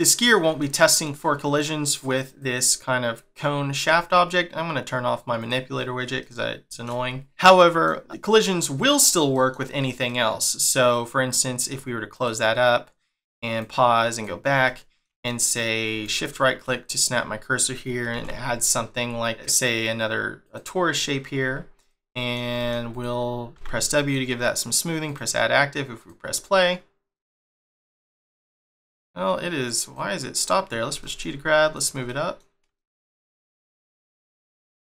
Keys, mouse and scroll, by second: 0.6 shift+middle click, 2.3 click, 5.4 click, 6.1 shift+middle click, 7.4 middle click, 9.3 middle click, 10.1 middle click, 12.0 click, 13.5 click, 14.0 click, 14.6 shift+middle click, 16.0 shift+right click, 16.5 middle click, 18.0 shift+a, 22.0 middle click, 22.4 g, 23.9 middle click, 25.0 click, 25.9 click, 27.1 middle click, 28.3 click, 28.7 click, 29.7 click, 30.8 g, 32.0 middle click, 33.4 click, 34.6 click.